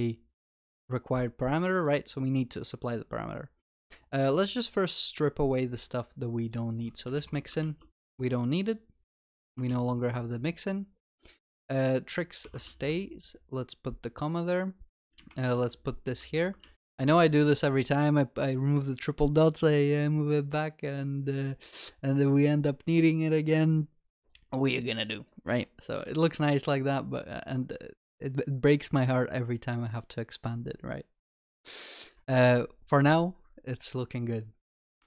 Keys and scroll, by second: 7.2 ctrl+y, 7.7 ctrl+s, 9.2 ctrl+y, 9.8 ctrl+s, 15.7 ctrl+y, 20.6 ctrl+s.